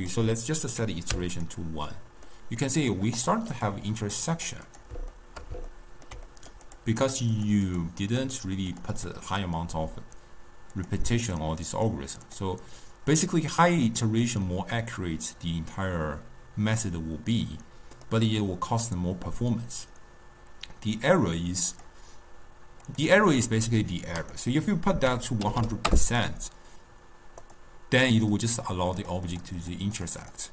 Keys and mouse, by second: 0.1-1.6 drag, 2.0-3.3 middle drag, 3.3 drag, 3.6 click, 4.1 click, 4.5 click, 4.8 click, 5.3-6.8 shift+middle drag, 6.8 drag, 7.1 click, 7.5 drag, 7.8 click, 8.2 drag, 8.5 click, 8.8 click, 9.1 click, 10.9-14.6 drag, 14.6-17.6 middle drag, 21.8-23.1 drag, 24.3-25.7 drag, 25.7 0, 27.5 click, 28.4 click, 29.1 click, 29.4 click, 29.7 click, 30.1 drag, 30.3 click.